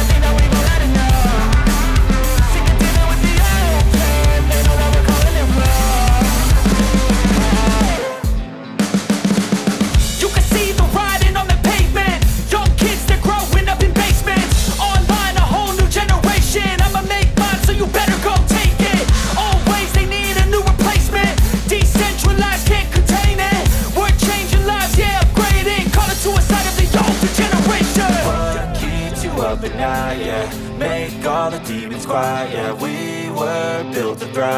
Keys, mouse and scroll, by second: 4.1 ctrl+z, 8.7 ctrl+z, 19.4 right click, 25.3 ctrl+z, 25.9 ctrl+z.